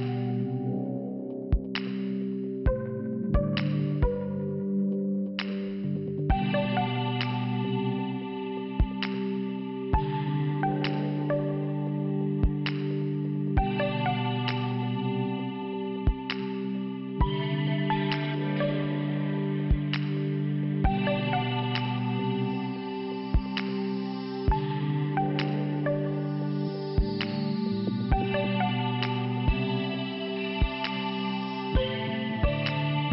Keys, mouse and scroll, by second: 4.0 click, 6.4 click, 9.3 f, 10.4 scroll up 1, 11.3 scroll up 1, 12.5 click, 16.4 click, 16.5 click, 17.6 click, 17.7 click, 17.8 click, 17.9 click, 18.1 scroll up 1, 19.8 click, 19.9 click, 21.4 click, 23.3 click, 23.6 scroll up 2, 24.0-24.3 scroll down 2, 27.8 p, 29.1 click, 31.2 click, 31.8 scroll up 1, 32.6 scroll up 1.